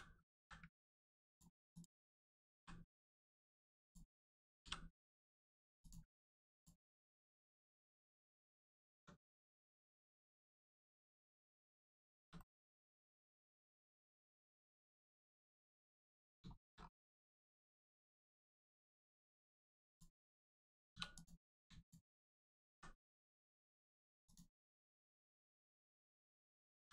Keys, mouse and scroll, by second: 0.3 z, 1.2 ctrl+click, 1.6 click, 2.5 g, 2.8 middle click, 4.9 middle click, 5.8 ctrl+click, 6.5 click, 6.8 middle click, 7.8 scroll down 1, 8.2 middle click, 8.4-8.9 scroll down 1, 8.9 Tab, 9.2 middle click, 9.6 scroll down 1, 9.9 middle click, 11.4 Tab, 11.6 middle click, 12.1 shift+middle click, 12.3 middle click, 14.6-14.9 scroll down 1, 15.0 middle click, 15.3 shift+middle click, 15.7 middle click, 16.5 middle click, 16.7 scroll up 1, 17.3 middle click, 18.3 click, 18.6 middle click, 19.8 click, 20.8 2, 21.1 click, 21.8 shift+click, 22.6 x, 24.2 click, 25.3 middle click, 26.7 ctrl+z.